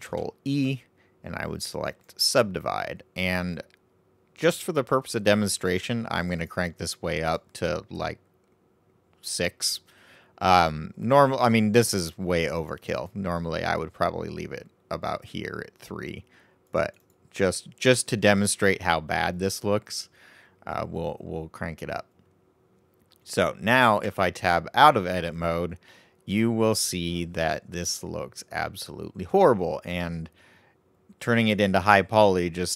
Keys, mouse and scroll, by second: 6.1-10.3 drag, 12.5-16.0 drag, 16.6-20.1 drag, 24.0 Tab, 25.5-28.5 middle drag.